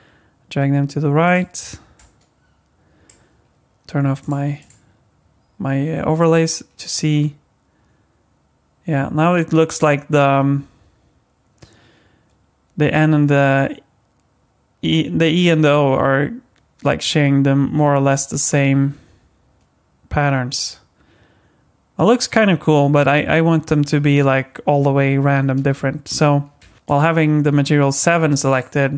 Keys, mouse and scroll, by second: 2.0 click, 4.2 click, 4.6 click, 6.3 space, 22.9 space, 26.1 click, 28.5 click.